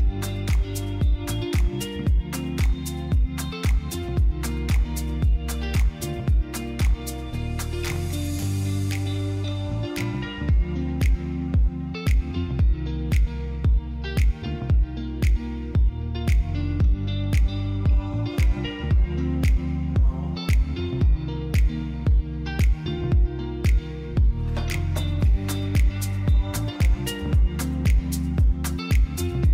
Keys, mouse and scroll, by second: 2.1 click, 2.5 shift+a, 4.3 g, 4.6 y, 5.6 click, 9.9 click, 11.8 click, 12.4 click, 14.1 click, 16.3 click, 16.8 click, 17.4 click, 20.0 click, 21.6-22.6 drag, 24.8 click, 27.9 shift+a.